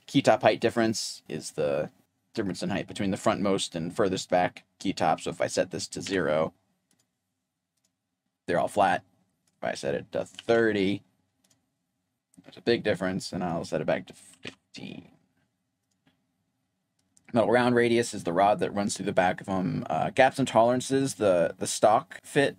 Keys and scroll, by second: 5.0-6.0 typing, 9.1-15.5 typing, 16.7-17.5 typing.